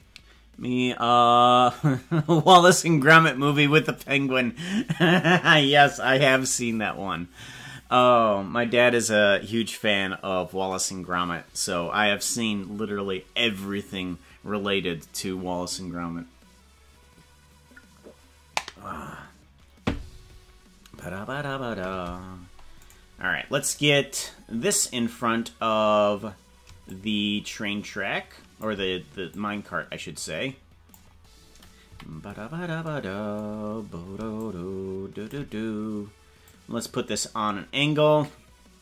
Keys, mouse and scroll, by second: 22.9 right click, 23.7 right click, 26.9-28.7 shift+drag, 29.3-30.9 drag, 31.9 KP_Decimal, 32.5 scroll down 5, 34.5 shift+click, 36.4-38.8 drag.